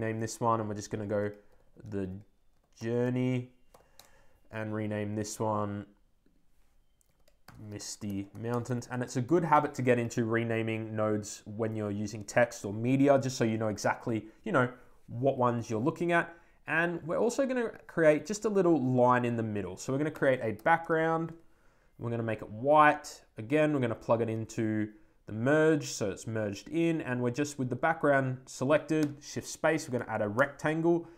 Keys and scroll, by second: 3.8 Return, 9.4 Return, 21.1 shift+Return.